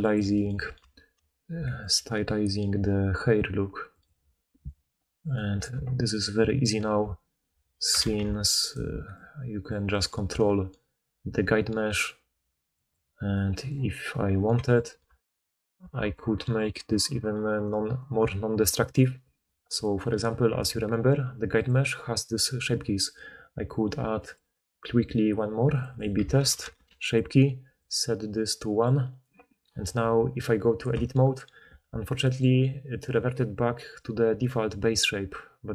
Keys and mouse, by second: 0.0 middle click, 0.8 alt+click, 1.5-3.6 middle drag, 1.9 g, 6.0 ctrl+z, 6.2-7.3 middle drag, 7.3 alt+shift+click, 7.3-8.6 alt+shift+middle drag, 8.2 ctrl+shift+z, 8.6 alt+shift+click, 8.7-11.7 alt+shift+middle drag, 10.2 g, 12.7 click, 14.8-15.6 middle drag, 15.2 Tab, 15.8-16.1 alt+middle drag, 15.9 alt+a, 16.9 click, 17.5 click, 17.8 click, 18.0-21.6 middle drag, 21.6 click, 21.7-24.1 middle drag, 24.1-25.8 drag, 25.8 middle click, 26.2 shift+click, 27.1 middle click, 27.8-35.7 drag, 30.1 Tab.